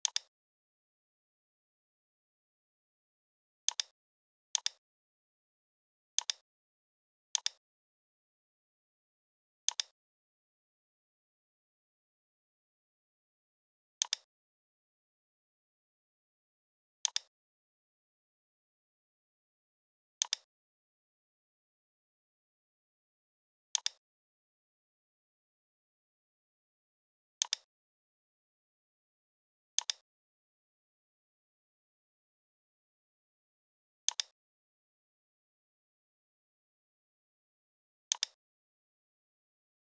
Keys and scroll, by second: 10.5 g, 26.6 v, 28.2 l, 32.3 i, 35.9 v.